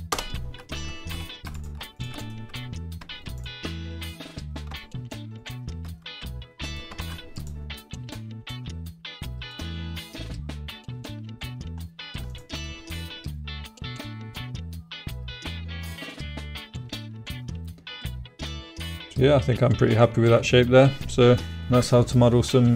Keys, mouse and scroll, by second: 1.1 3, 1.8 shift+right click, 1.9 shift+click, 2.3 middle click, 4.1 shift+middle click, 4.3 middle click, 6.0 middle click, 6.5 middle click, 7.0 alt+e, 9.4 click, 9.9 click, 10.0-11.4 middle drag, 11.8 middle click, 12.3 click, 12.6 click, 13.5-15.5 middle drag, 15.9-20.0 middle drag, 20.4 middle click.